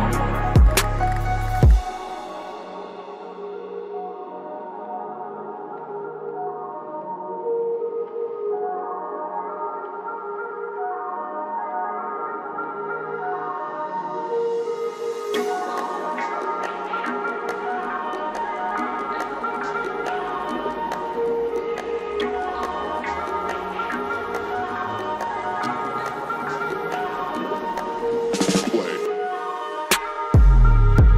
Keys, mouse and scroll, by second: 1.3 scroll down 1, 5.6-8.1 drag, 12.9 click, 16.7 shift+Page_Down, 18.0-20.9 drag, 20.9 ctrl+right click, 22.1 click, 23.7 shift+Page_Down, 25.0-26.9 drag, 27.5 scroll up 1, 28.0-29.7 drag, 29.7 scroll down 1, 30.7 click.